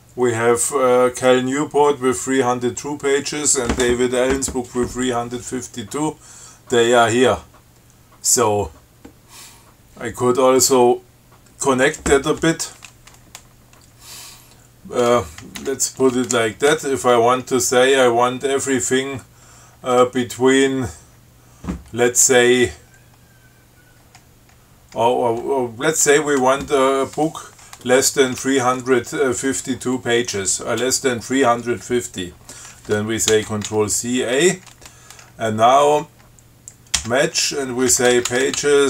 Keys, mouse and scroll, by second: 15.8 q, 33.6 ctrl+c, 33.9 ctrl+a, 37.2-38.8 typing.